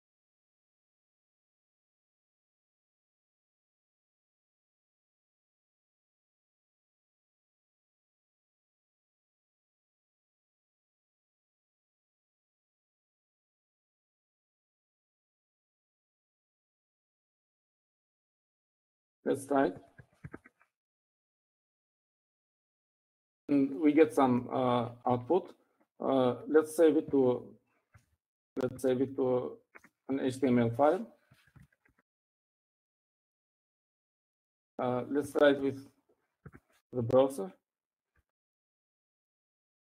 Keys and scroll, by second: 0.8-1.1 typing, 4.0 typing, 18.6-19.3 typing, 20.9-22.6 typing, 26.0 Up, 28.5 shift+l, 29.6 BackSpace, 30.1 shift+., 31.3-34.8 typing, 35.9-38.5 typing, 39.7-39.9 typing.